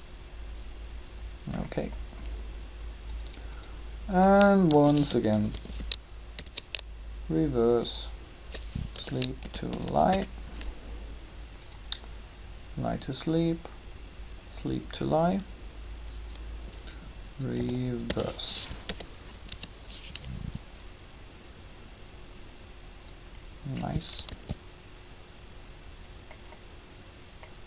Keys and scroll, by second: 4.5-6.2 typing, 8.9-9.7 typing, 9.9 Return, 17.6 a, 24.3 alt+a.